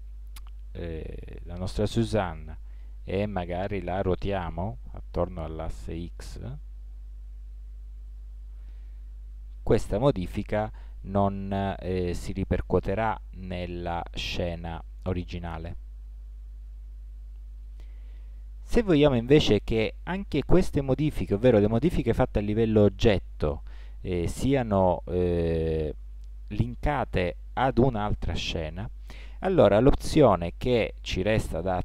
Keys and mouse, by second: 4.2 r, 12.1-13.4 drag.